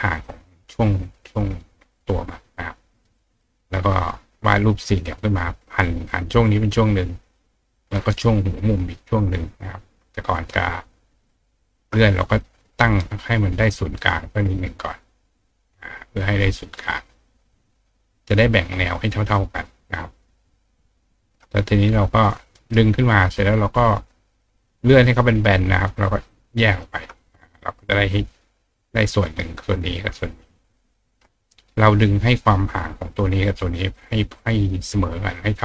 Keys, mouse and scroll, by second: 3.0 right click, 5.2-8.0 drag, 8.0-11.5 drag, 11.6-12.8 shift+drag, 13.0-14.1 drag, 14.2-14.9 drag, 15.0-16.2 drag, 16.3-16.7 drag, 16.8-17.3 drag, 17.4 click, 17.5-18.9 right drag, 18.9-20.4 shift+drag, 21.3-22.7 shift+drag, 21.3-22.7 shift+right drag, 23.9-25.0 drag, 26.2 shift+click, 27.5 click, 29.7 click, 30.2 ctrl+click, 31.3 click.